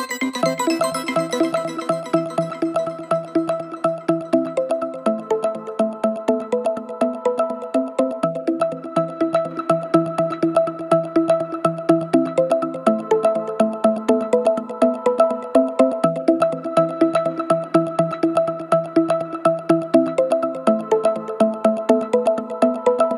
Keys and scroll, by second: 21.7 ctrl+z, 22.1 ctrl+z.